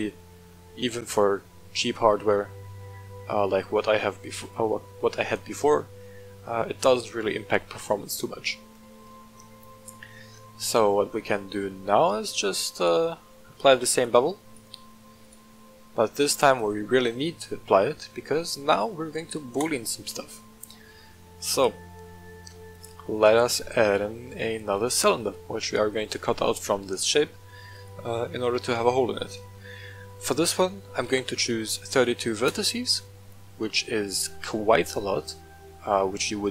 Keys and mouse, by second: 10.3-11.2 middle drag, 12.7 shift+click, 13.7 ctrl+l, 15.2 click, 16.2 w, 17.0 middle click, 18.9-19.6 drag, 20.2-21.7 middle drag, 22.3 shift+a, 23.5 shift+a, 27.7-33.0 drag.